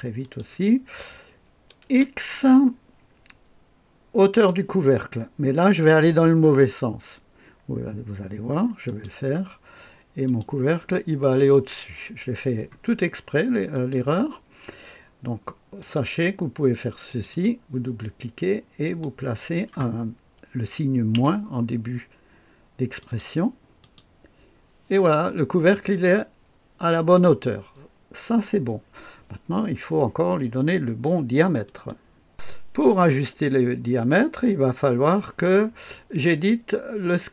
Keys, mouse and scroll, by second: 0.1 click, 1.8 x, 4.2 click, 8.8 click, 10.2 click, 13.6 click, 15.7 click, 16.4 click, 17.0 click, 17.2 click, 18.8 click, 21.0 -, 22.9 click, 31.6 click, 32.2 click.